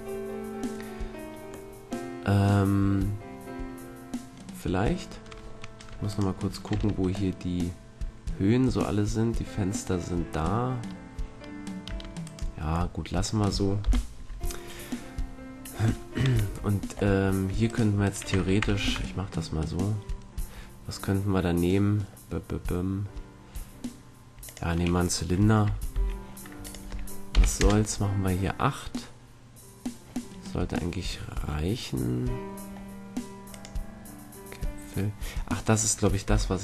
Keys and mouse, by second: 1.7-3.5 middle drag, 6.0 right click, 6.7 Tab, 7.3-8.9 middle drag, 11.8 Tab, 12.2-14.2 right drag, 13.8 KP_1, 15.3 right click, 18.3 Tab, 18.7 shift+a, 25.9 t, 26.6-28.1 drag, 28.3 click, 31.4 middle click, 33.5-35.5 drag, 36.2 z.